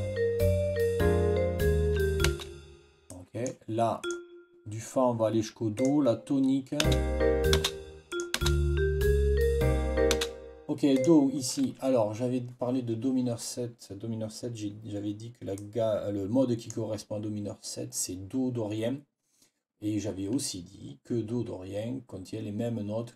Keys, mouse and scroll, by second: 2.2 space, 3.0 click, 3.9 click, 5.6 click, 6.7 space, 7.4 space, 8.0 click, 8.3 space, 10.8 click, 15.4-16.6 drag, 16.6 scroll up 1.